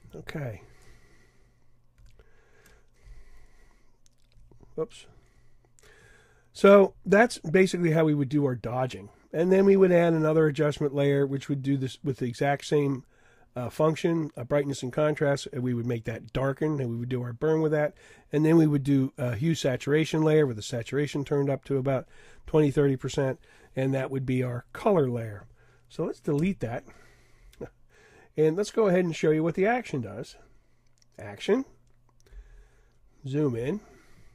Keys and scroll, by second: 2.0 super+0.